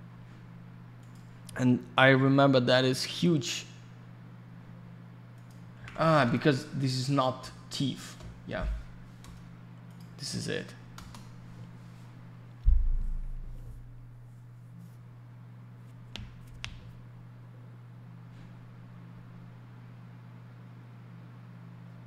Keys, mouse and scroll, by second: 1.0 click, 5.3 click, 5.5 click, 5.7 ctrl+v, 7.3 BackSpace, 9.9 click, 9.9 click, 10.9 Return, 18.7-19.7 scroll down 1.